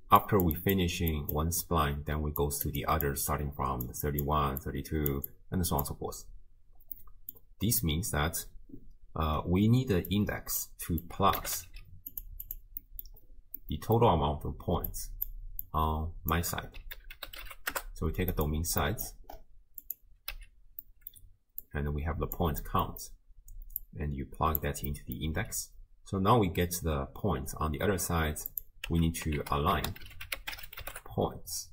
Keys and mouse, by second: 0.0-6.7 typing, 0.2 click, 2.4 click, 3.3 click, 5.1 click, 5.3 click, 7.0 middle click, 10.2 click, 11.1-12.6 drag, 11.7 d, 12.8 middle click, 13.6 middle click, 14.9 click, 15.6-18.5 drag, 18.8 middle click, 19.9 click, 20.8 middle click, 21.7-22.4 drag, 22.7 middle click, 23.8-24.6 drag, 24.9 middle click, 28.5 click, 28.9 x, 29.4 ctrl+a.